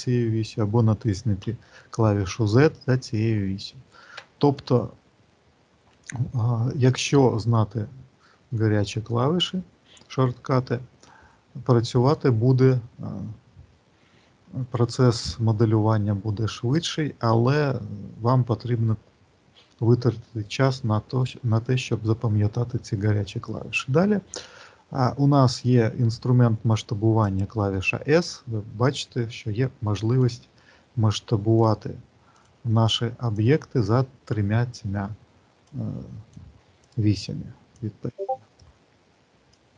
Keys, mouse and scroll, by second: 27.1 click, 28.7 click, 31.1 click, 32.2 click, 33.2 click, 35.6 click, 36.7 click, 37.6 click, 39.3 click.